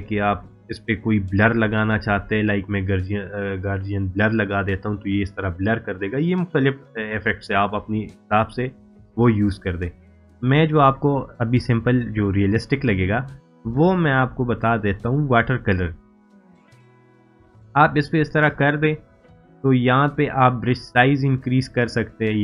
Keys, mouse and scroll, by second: 2.6 click, 5.8 click, 14.9 click, 20.7 click.